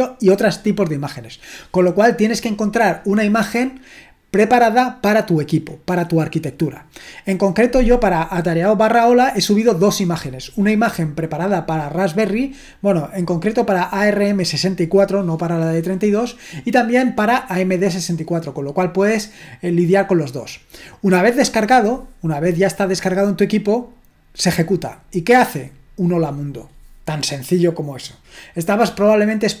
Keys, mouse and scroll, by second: 24.7-29.6 drag.